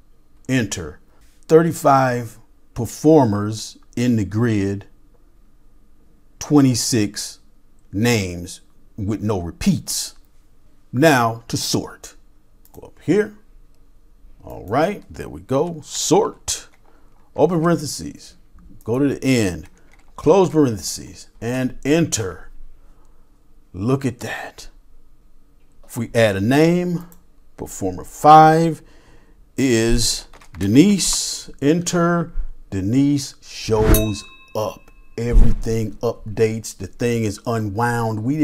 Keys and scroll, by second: 15.9-17.6 typing, 20.3-21.9 typing.